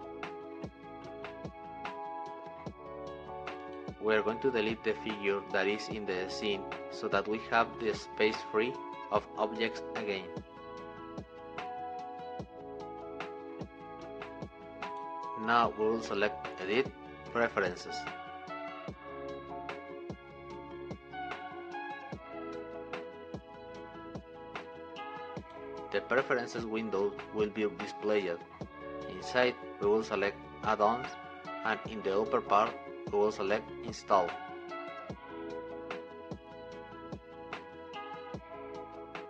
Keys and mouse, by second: 0.6 click, 1.9 middle click, 11.5 x, 20.5-23.3 drag.